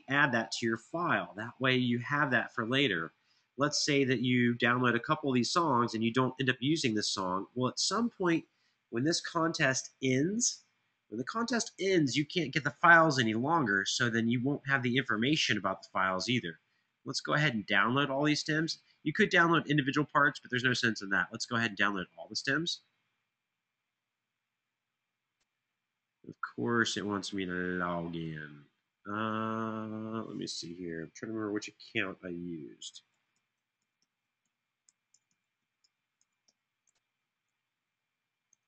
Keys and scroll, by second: 32.6-35.1 typing, 36.2-36.9 typing, 38.2-38.6 typing.